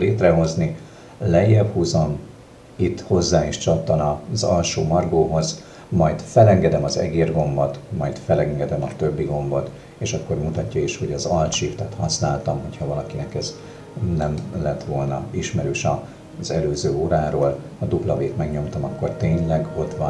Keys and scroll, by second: 19.4 w.